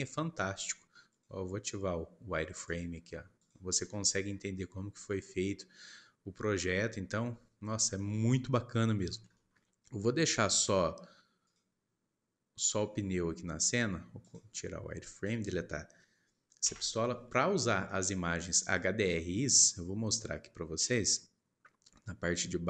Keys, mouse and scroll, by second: 1.0-3.8 drag, 3.8-7.6 middle drag, 7.6 scroll down 1, 8.0 middle click, 8.7-9.0 scroll down 2, 9.4 shift+middle click, 10.0-11.4 scroll up 1, 11.4-17.5 drag, 17.5-17.8 scroll down 1, 17.8 shift+middle click, 18.4-18.9 scroll up 1.